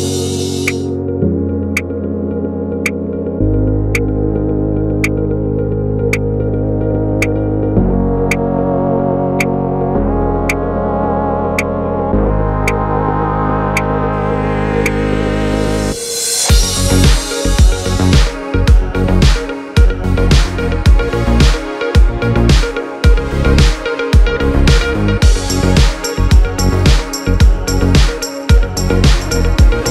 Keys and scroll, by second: 3.4 super+d, 4.4 alt+[, 6.7 alt+], 18.1 space, 23.0 space.